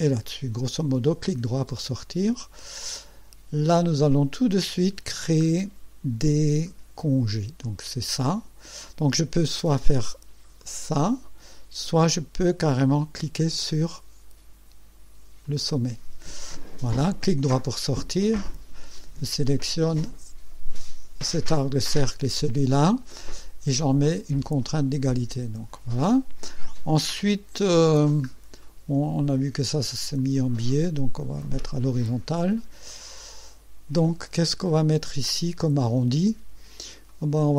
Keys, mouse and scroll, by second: 1.3 right click, 2.0 scroll up 2, 2.6 right click, 3.6-4.4 right drag, 5.2 scroll up 2, 7.6 click, 9.5 click, 10.6 click, 15.4 click, 17.2 right click, 18.9 click, 20.7 click, 24.6 click, 25.7 scroll up 2, 28.0 scroll down 1, 28.6 right click, 30.2 click, 31.4 click, 32.4 scroll up 1, 32.9-33.7 right drag, 35.3 click, 36.5 scroll up 1, 37.1-37.5 right drag.